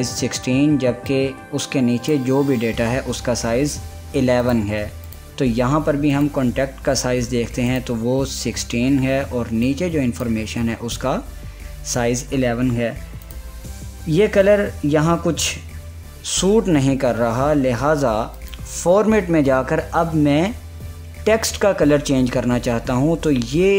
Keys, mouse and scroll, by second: 5.0 click, 5.9 click, 10.3-13.1 drag, 13.9-18.4 drag, 19.0 click.